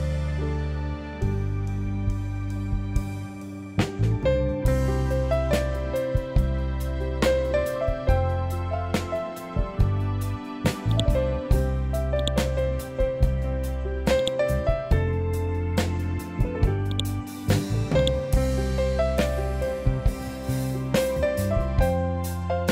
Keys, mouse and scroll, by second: 0.0-2.2 typing, 2.7 Return, 3.8-9.6 typing, 10.8-16.8 drag.